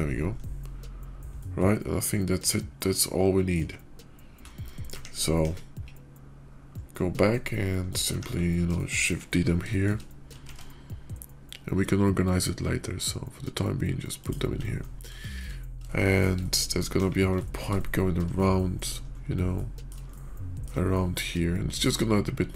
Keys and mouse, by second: 0.1-3.5 middle drag, 5.2 KP_5, 5.9 /, 7.6-8.0 middle drag, 8.6 shift+middle drag, 9.2 KP_5, 9.6 shift+middle drag, 10.3 shift+d, 15.1 shift+click, 15.8-16.1 shift+middle drag, 16.3-16.7 middle drag, 16.9 KP_5, 17.3 shift+middle drag, 18.3-18.7 shift+middle drag, 19.4 middle click, 19.9-20.6 shift+middle drag, 21.1 shift+middle click.